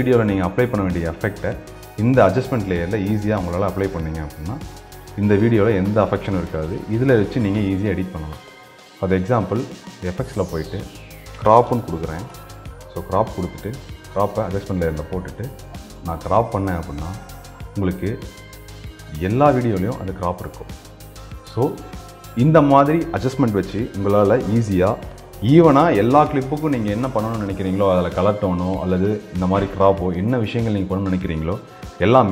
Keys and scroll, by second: 18.0 ctrl+a.